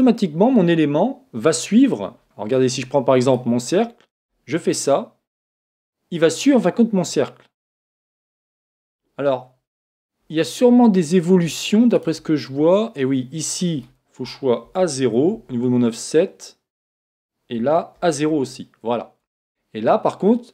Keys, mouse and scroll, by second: 3.2 right click, 4.1 s, 10.7-13.5 middle drag, 11.9 right click, 13.5 click.